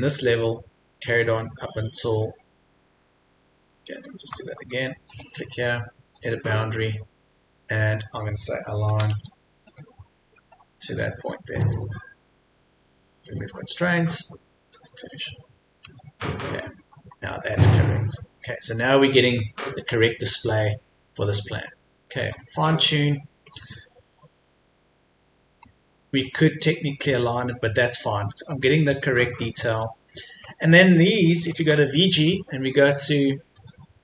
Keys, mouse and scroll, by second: 3.8 Escape, 5.1 click, 6.9-8.9 scroll up 1, 8.9 typing, 9.6 click, 10.0-10.6 scroll down 1, 11.6 click, 14.0 Escape, 14.7 click, 15.8 Escape, 16.5 middle click, 17.1-17.6 scroll up 1, 17.9 middle click, 18.2 Escape, 18.4-19.1 scroll down 1, 19.1 middle click, 20.6-21.2 scroll down 1, 21.2 middle click, 21.6-22.0 scroll up 1, 23.5 scroll down 1, 24.0 Escape, 24.2-24.6 scroll down 1, 24.8-25.2 scroll up 1, 25.2 Escape, 27.2-27.6 scroll down 1, 28.0-28.4 scroll up 1, 28.7-29.1 scroll down 1, 29.1-29.8 scroll up 1, 29.8 click, 30.4 scroll down 1, 30.7 Escape, 31.6 typing, 33.0 click.